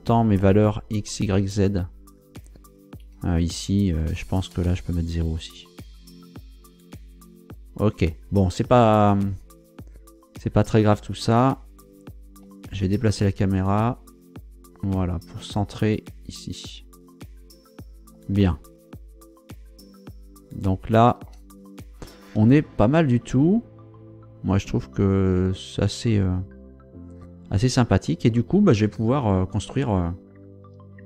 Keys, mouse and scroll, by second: 3.0 Escape, 4.3 shift+click, 4.7 shift+0, 5.2 shift+Return, 11.9 g, 12.4 x, 17.6 click, 18.4 shift+middle click, 18.9 shift+click, 19.9-21.5 shift+middle drag, 21.6-22.0 shift+scroll down 1, 26.7-27.4 scroll up 1, 27.6 scroll down 2.